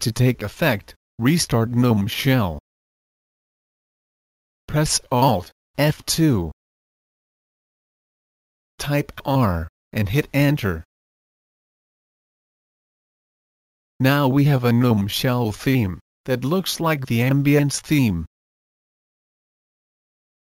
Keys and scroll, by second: 4.2 alt+F2, 8.1 r.